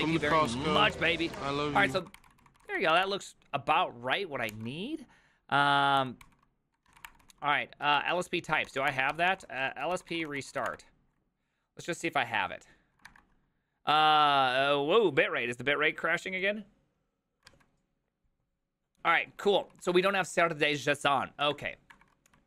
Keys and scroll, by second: 0.1-4.5 typing, 4.5 ctrl+h, 6.0 ctrl+t, 6.0-11.2 typing, 6.3 ctrl+n, 12.9-13.6 typing, 19.9 alt+{, 19.9 j, 20.4 j, 21.5 ctrl+^, 21.9 ctrl+^.